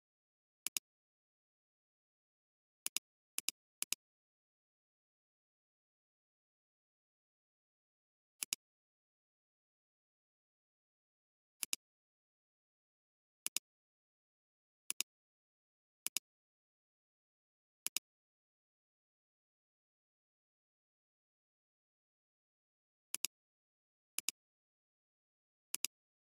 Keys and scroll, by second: 0.6 alt+space, 1.8 alt+space, 3.8 space.